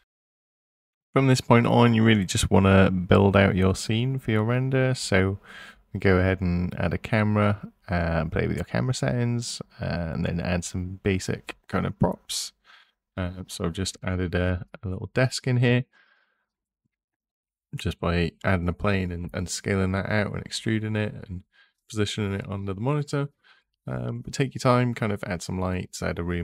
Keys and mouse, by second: 2.7 KP_0, 5.1 shift+a, 6.1 shift+s, 9.1 shift+a, 15.5 g, 16.0 z, 19.8 s, 22.9 s, 23.3 y, 24.9 click, 25.6 s, 26.0 x.